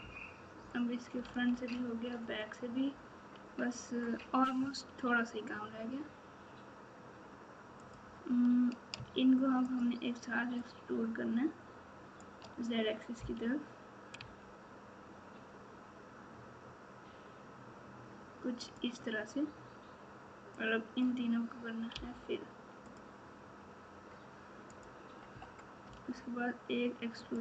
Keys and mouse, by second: 7.8 click, 9.7 shift+click, 10.5 shift+click, 10.9-12.2 shift+drag, 13.1 e, 20.8-21.9 drag, 21.9 f, 22.8 click, 24.7 click, 25.8 e.